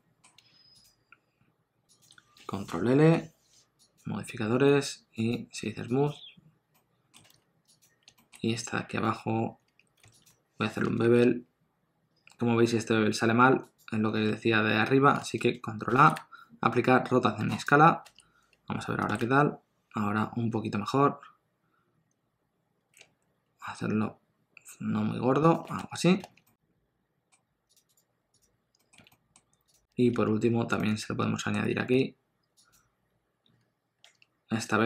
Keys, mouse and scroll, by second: 0.7 shift+click, 2.8 ctrl+l, 5.1 right click, 6.7 middle click, 7.2 alt+a, 7.7 click, 8.1 shift+middle click, 8.6-9.0 scroll up 1, 9.0 Tab, 9.6 2, 10.2 alt+click, 11.0 ctrl+b, 14.2 Tab, 15.9 ctrl+a, 18.0 Tab, 19.2 ctrl+b, 25.7 Tab, 26.2 alt+a, 26.4 middle click, 27.6 click, 27.9 right click, 28.7 middle click, 29.0 alt+a, 29.1 middle click, 29.6 click, 29.6-30.1 scroll up 2, 30.1 Tab, 30.7 middle click, 31.7 2, 32.6 alt+click, 34.0 Tab.